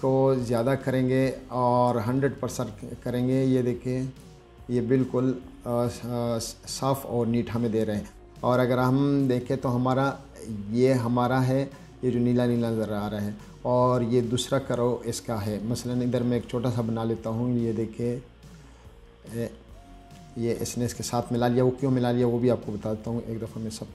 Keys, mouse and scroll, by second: 0.7 click, 1.5 click, 3.1-4.5 drag, 11.1-11.4 scroll up 2, 11.9-16.1 scroll up 1, 16.7-19.6 drag.